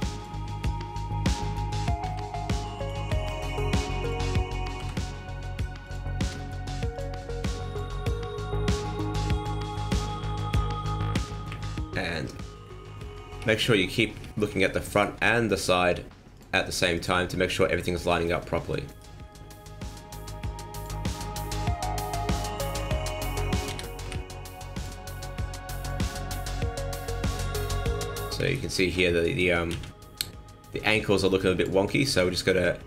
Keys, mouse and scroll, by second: 2.0 s, 2.9 r, 4.7 e, 6.1 s, 7.0 r, 7.8 g, 9.6-10.1 scroll down 7, 11.0 KP_1, 11.4 KP_3, 12.6-13.1 scroll up 8, 13.4 shift+middle click, 14.0 scroll up 1, 14.2 shift+middle click, 14.4 n, 14.8 alt+right click, 16.3 click, 16.9 click, 18.8 alt+right click, 19.2-19.8 scroll down 1, 19.8 click, 20.9 scroll down 3, 21.2 shift+middle click, 21.7 scroll up 3, 22.5 alt+right click, 23.6 s, 25.1 click, 26.0 shift+middle click, 26.5 scroll up 1, 27.5 alt+right click, 28.4 alt+shift+right click, 29.6 z, 30.7 z.